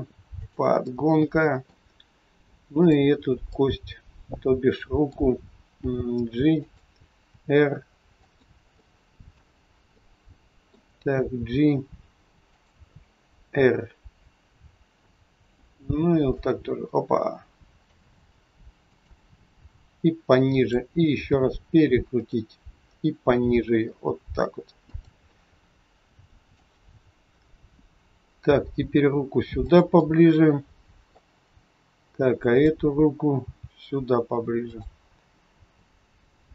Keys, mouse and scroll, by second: 0.9 middle click, 2.8 click, 3.5 middle click, 5.8 g, 8.6 middle click, 8.6 scroll up 1, 9.4 scroll down 2, 10.0 middle click, 11.4 g, 16.0 middle click, 16.5 r, 19.5 g, 25.3 middle click, 26.9-28.2 scroll up 3, 28.4 g, 29.9 middle click, 32.4 click, 33.4 g, 35.1-36.5 scroll up 3.